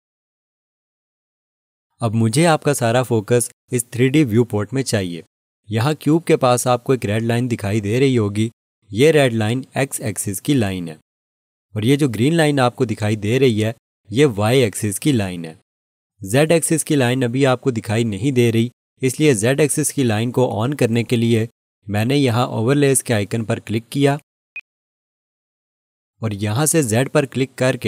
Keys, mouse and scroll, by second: 24.5 click.